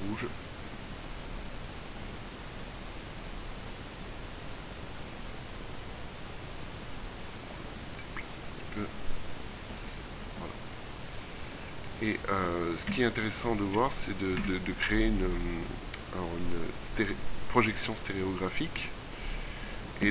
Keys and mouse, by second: 9.4 middle click, 13.0 KP_3, 13.8 a, 14.4 KP_1.